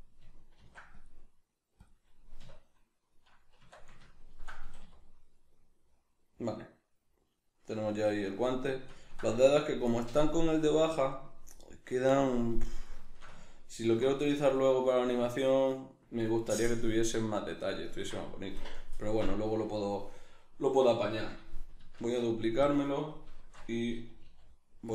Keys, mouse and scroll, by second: 0.6 ctrl+r, 1.9 click, 2.4 \, 3.2 middle click, 3.6 Tab, 4.0-4.6 ctrl+middle drag, 4.6 a, 11.2-13.0 right drag, 13.0 shift+middle click, 20.4 right click, 22.0 shift+d, 22.7 click, 23.4 shift+Tab, 24.2 g.